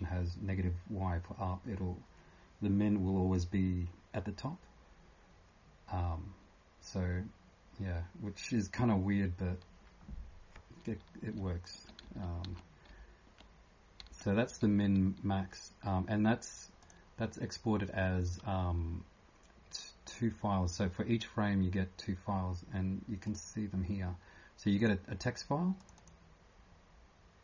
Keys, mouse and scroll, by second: 11.4 f, 16.8 click, 17.7 typing, 19.8 typing, 23.3-27.4 click.